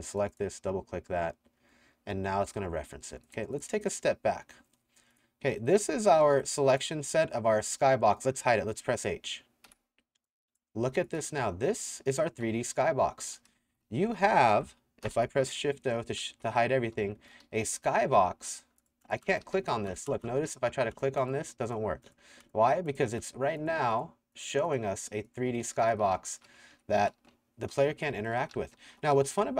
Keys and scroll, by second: 4.0 s, 5.6-7.1 typing, 9.7 h, 11.4 a, 12.7-20.5 typing, 26.2-29.5 typing, 26.7 Escape.